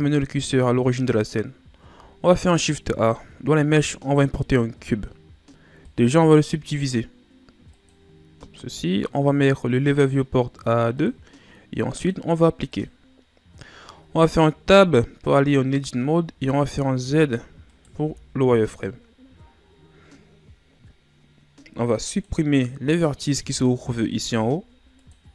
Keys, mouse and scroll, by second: 0.4-1.4 ctrl+scroll down 2, 1.4-2.3 scroll up 2, 2.3 shift+a, 5.8 click, 7.9 click, 11.0 click, 14.0 Tab, 15.1-16.0 ctrl+scroll up 2, 16.0-17.0 shift+scroll up 2, 17.0 z, 17.7 right click, 18.0 b, 24.2 x.